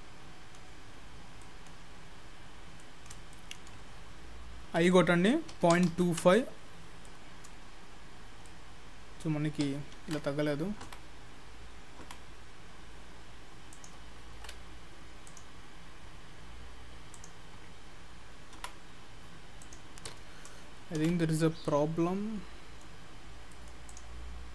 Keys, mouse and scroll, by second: 0.8-1.4 scroll up 4, 1.4 middle click, 1.9-2.8 scroll up 5, 2.8 middle click, 3.4 shift+middle click, 4.7 i, 7.1 middle click, 7.8-8.2 scroll down 3, 8.2-9.7 scroll up 2, 8.5 middle click, 10.0 ctrl+z, 10.9 i, 12.0 i, 14.4 ctrl+z, 15.3 click, 21.1 ctrl+z, 21.3-21.6 scroll down 2, 21.7 middle click, 23.4-23.9 scroll down 2, 23.6 middle click, 23.9 click.